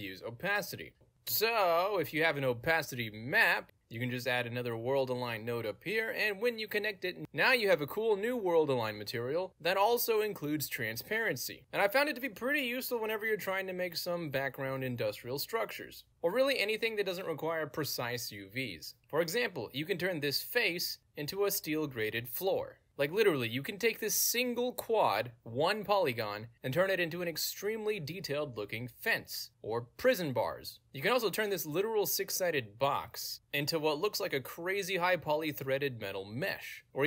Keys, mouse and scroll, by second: 0.0-0.7 typing, 0.5 click, 0.8 Return, 1.2 click, 2.2 click, 2.3 right click, 4.0 click, 4.2 click, 5.9 click, 6.7 alt+right click, 7.4 click, 7.4 alt+right click, 9.0 click, 9.9-11.6 alt+drag, 11.6 space, 12.8 space, 14.2 w, 16.9 d, 17.5 a, 19.7 ctrl+space, 21.1 click, 22.2 click, 22.9 alt+right click, 23.2 alt+click, 24.1 ctrl+space, 24.8 click, 25.5 r, 25.6 click, 26.3 click, 26.7 g, 26.8 alt+right click, 27.1-28.6 alt+drag, 28.8 click, 29.5 ctrl+space, 29.5 click, 30.8 alt+click, 32.9 ctrl+z, 33.2 g, 33.6-36.1 alt+drag, 36.4-37.0 alt+drag.